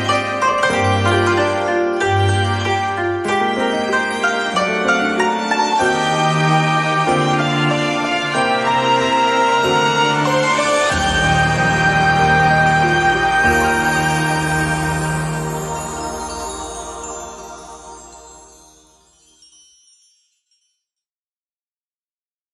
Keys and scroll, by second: 7.1 ctrl+z.